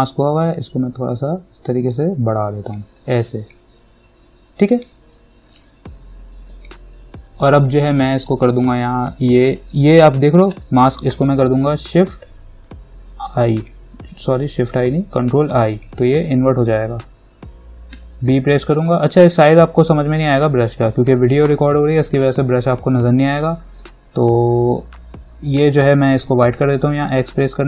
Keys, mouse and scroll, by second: 0.8-8.4 drag, 13.3 shift+i, 15.5 ctrl+i, 18.2 b, 19.2-26.4 alt+right drag, 26.4 x.